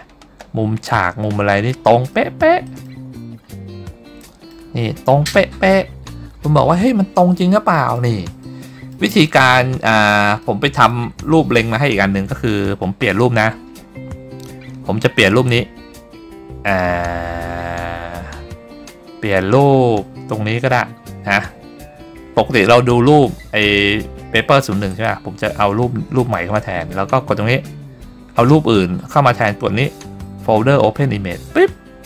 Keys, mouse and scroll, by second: 0.3 scroll up 2, 1.3-1.9 scroll down 4, 2.3 middle click, 2.9 middle click, 3.2-4.0 scroll up 5, 4.3 middle click, 5.0-5.6 scroll up 1, 5.6-6.2 scroll down 4, 6.8-8.1 middle drag, 8.5 middle click, 9.4 scroll down 2, 10.0 scroll up 1, 10.5 middle click, 11.2 scroll up 1, 20.8-23.9 scroll down 3, 25.0-26.5 drag, 31.6 click.